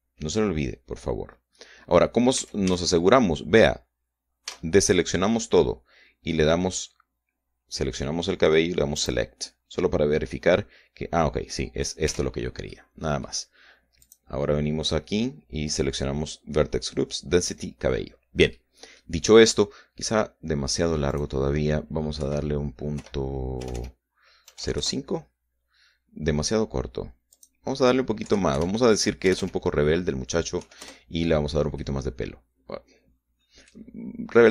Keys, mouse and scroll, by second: 3.1 a, 5.3 a, 9.7 click, 11.1-12.8 middle drag, 12.9 Tab, 13.5 middle click, 14.8 click, 19.3 middle click, 20.5 scroll down 1, 20.7-21.3 scroll up 2, 21.9 click, 23.0 Right, 23.8 =, 24.4 BackSpace, 25.3 KP_0, 25.4 KP_5, 25.6 KP_Enter, 28.1 click, 29.1 Right, 29.3 =, 30.1 BackSpace, 31.4 KP_8, 31.6 KP_Enter, 32.6-34.5 drag.